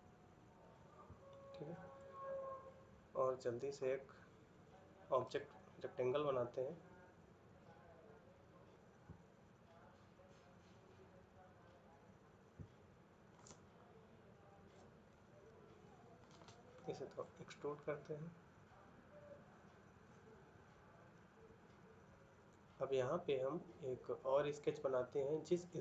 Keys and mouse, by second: 17.2 middle click, 20.9 middle click.